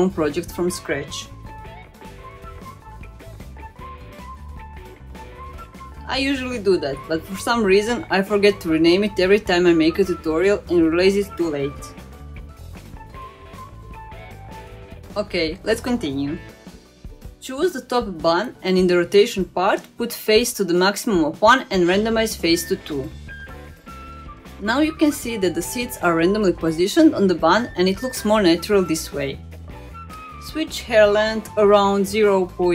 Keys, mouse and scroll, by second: 1.0 click, 2.2 click, 2.3-4.5 drag, 4.1 t, 5.6 click, 6.1 click, 6.3-9.0 drag, 7.6 t, 10.1 click, 10.5 click, 10.7-13.0 drag, 12.1 t, 15.6-16.9 scroll up 2, 17.0 click, 19.2 click, 19.7 click, 20.1-20.9 scroll down 2, 20.9-22.1 drag, 22.9-25.1 drag, 25.5-26.7 middle drag, 27.4-28.3 scroll up 2, 30.2-32.7 drag.